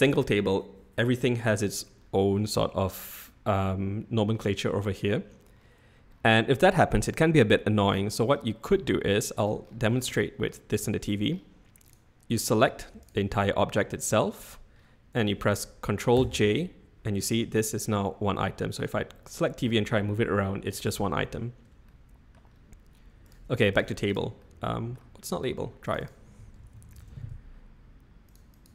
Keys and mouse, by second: 9.1-9.4 middle drag, 10.2-10.5 middle drag, 16.1 ctrl+j, 17.7 click, 18.3 g, 20.8 ctrl+z, 21.2 ctrl+z, 21.8 click, 22.1 middle click, 23.7 click, 24.1 click, 24.4-24.9 middle drag, 25.9 click, 26.0-27.6 drag, 28.3 click, 28.5 click.